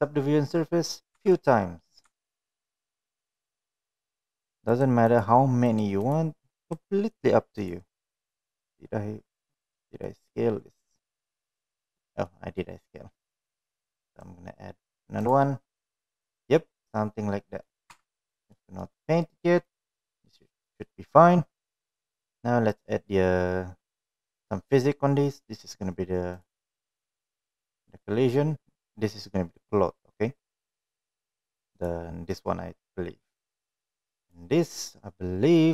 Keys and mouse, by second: 2.2 Tab, 2.8-3.7 right drag, 4.0 right click, 4.8 right click, 5.8 right click, 6.7-7.7 right drag, 8.3 middle click, 10.1-11.8 middle drag, 12.4 middle click, 14.3-15.5 right drag, 15.9 click, 16.7-17.7 middle drag, 18.0 Tab, 18.4 click, 18.6 middle drag, 19.7 click, 22.8 click, 26.5 click, 27.9 click, 31.9 click, 33.6 click, 34.4 click.